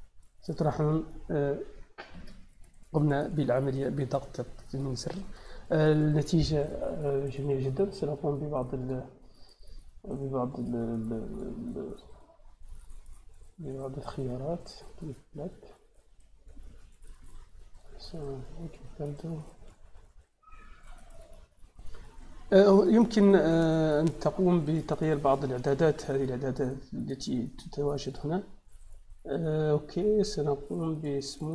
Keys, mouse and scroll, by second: 3.1-3.6 drag, 4.2-5.1 drag, 8.7 click, 10.4-11.2 drag, 14.5 click, 15.9 click, 17.0 click, 18.3 drag, 23.6-24.6 drag, 27.1 click, 27.9 click, 31.2 click.